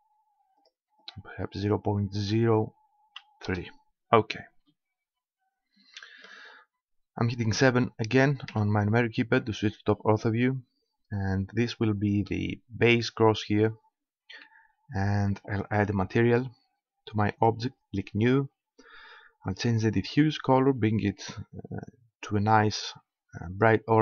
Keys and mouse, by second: 0.6-2.6 drag, 4.5-6.0 middle drag, 8.5 KP_7, 13.4 middle click, 16.2-19.1 drag, 19.5-21.2 drag.